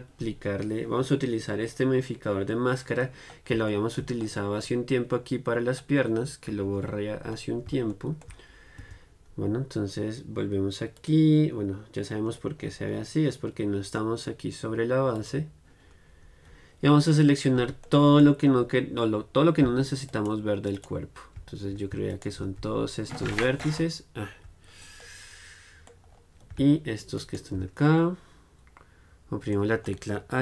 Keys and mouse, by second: 6.6 KP_1, 9.2 Tab, 11.2-13.0 drag, 13.0-15.5 middle drag, 15.5-17.2 drag, 17.2-19.0 middle drag, 19.0-25.3 drag, 25.3 right click, 25.4-27.4 middle drag, 27.4 right click, 28.3-29.8 middle drag, 28.6 right click.